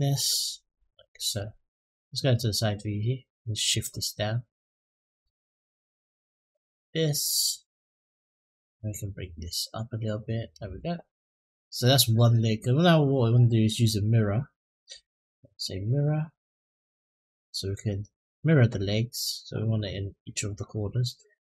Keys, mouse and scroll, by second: 2.0 click, 3.5-6.6 drag, 8.6-10.3 drag, 11.0-11.9 middle drag, 13.9 click, 14.5 click, 15.1-18.1 drag.